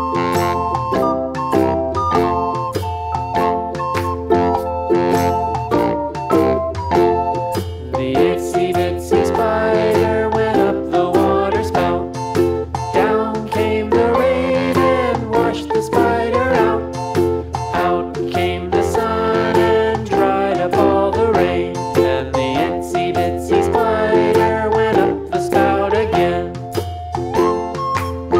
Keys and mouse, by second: 0.9 Up, 6.2 click, 7.2 ctrl+d, 14.2 click, 15.5 BackSpace, 16.2 click, 16.6 ctrl+-, 17.3-17.8 space, 18.2-18.6 click, 18.9-19.4 space, 21.7-24.7 alt+drag, 25.7-27.9 shift+drag, 28.3 space.